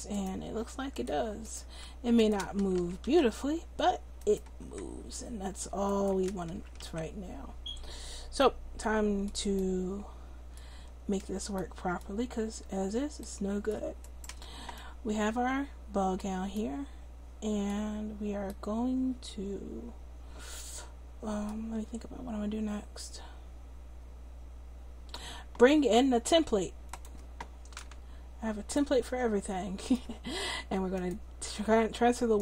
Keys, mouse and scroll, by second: 0.2 right click, 0.4 r, 1.6 r, 2.5 a, 2.7 a, 3.1 alt+r, 4.6 r, 6.3 a, 6.5 a, 6.8 alt+r, 14.1-16.0 middle drag, 26.9-32.0 right drag.